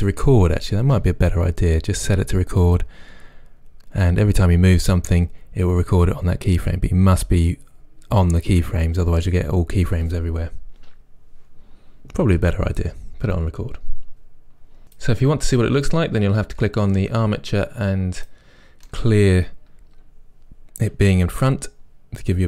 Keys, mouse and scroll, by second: 13.0-18.2 middle drag, 14.8 click, 18.2-18.9 drag, 18.9-22.4 middle drag.